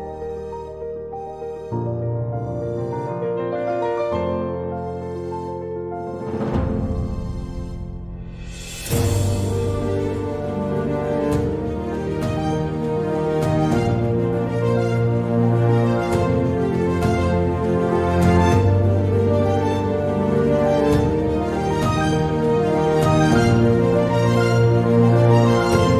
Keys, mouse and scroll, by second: 3.6 Tab, 4.4 click, 5.1 click, 7.0 e, 10.8 e, 17.1 e, 20.7 click, 21.8 e.